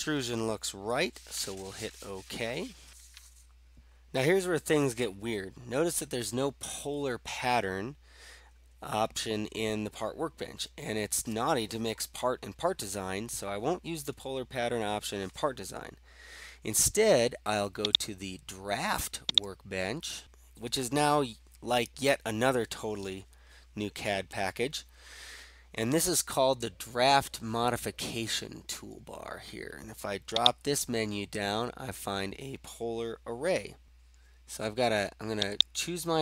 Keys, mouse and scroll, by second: 18.1-19.1 drag, 30.5-31.6 drag, 35.7 click.